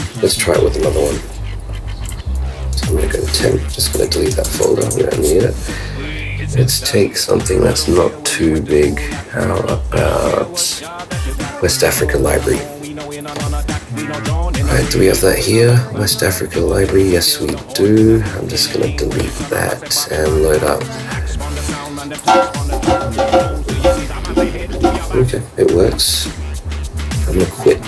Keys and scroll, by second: 2.6 super+Up, 3.9 super+BackSpace, 4.8 shift+super+Return.